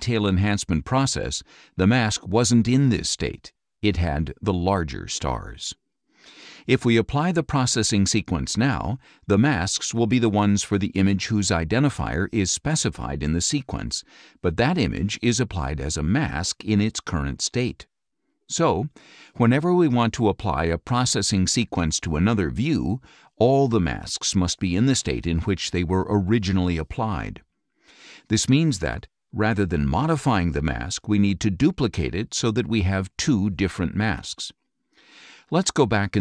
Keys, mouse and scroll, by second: 2.8 click.